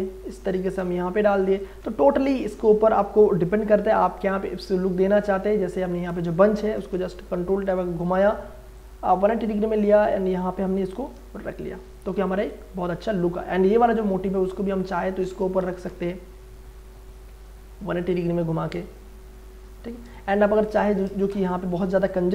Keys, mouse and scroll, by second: 1.6 ctrl+Return, 4.2 ctrl+click, 4.8-5.9 ctrl+scroll up 1, 5.9 ctrl+click, 6.7 ctrl+j, 7.1 ctrl+t, 8.0 right click, 8.8 click, 8.8-12.3 drag, 12.3 Return, 13.7 click, 14.3-15.6 alt+drag, 15.5 ctrl+t, 15.8 ctrl+right click, 18.1 ctrl+click, 20.2 ctrl+space, 20.3 ctrl+click, 21.3 Return, 22.0-22.3 drag.